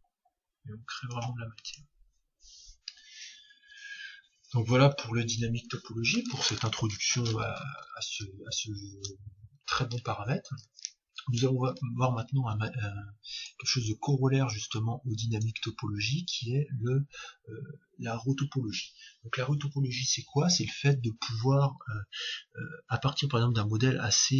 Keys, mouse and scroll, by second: 1.7-3.6 drag, 23.4-24.3 middle drag.